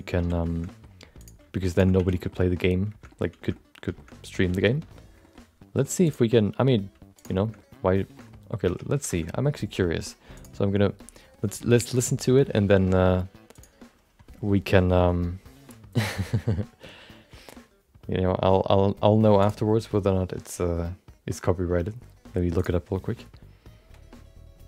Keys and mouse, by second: 0.1 f, 0.4 shift+middle click, 0.6 middle click, 1.2 click, 1.7 shift+click, 1.9 f, 2.3 middle click, 2.4 middle click, 3.1 middle click, 3.5 middle click, 3.9 middle click, 4.5 middle click, 4.7 middle click, 5.2 middle click, 6.0 click, 6.3 middle click, 6.8 g, 7.6 middle click, 8.1 middle click, 8.4 middle click, 8.9 Tab, 9.1 shift+middle click, 10.4-15.0 drag.